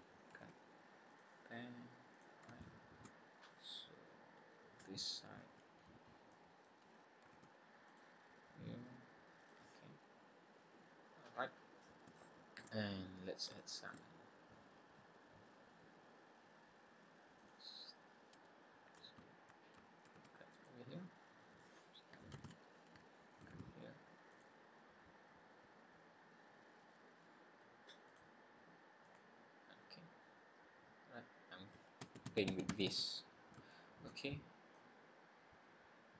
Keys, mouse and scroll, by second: 0.4 ctrl+r, 2.6 shift+middle click, 3.2-3.9 scroll down 3, 4.0-4.4 scroll up 3, 6.3 middle click, 7.2 ctrl+r, 10.8-12.0 scroll down 7, 12.0 scroll down 1, 12.1 shift+middle click, 13.0 scroll up 2, 13.5 shift+middle click, 14.0 scroll up 1, 17.4 click, 20.0 ctrl+r, 22.5 ctrl+z, 23.6 ctrl+r, 29.1 click, 29.8-30.3 scroll down 5, 33.6 shift+middle click, 34.2-34.6 scroll up 2, 34.7 middle click.